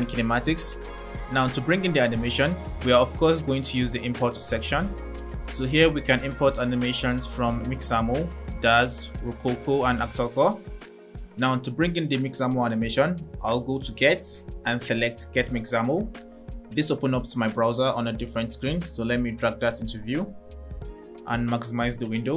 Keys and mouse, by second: 6.3-12.4 drag, 14.4-15.8 drag.